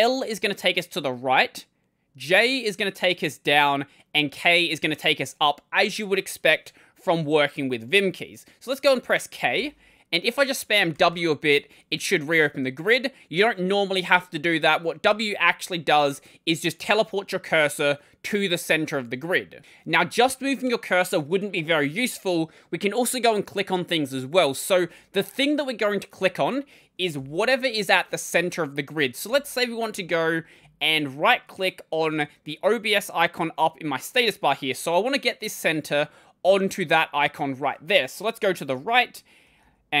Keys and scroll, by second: 9.4 k, 10.8 w, 10.9 w, 27.0 ctrl+;, 39.3-40.0 typing.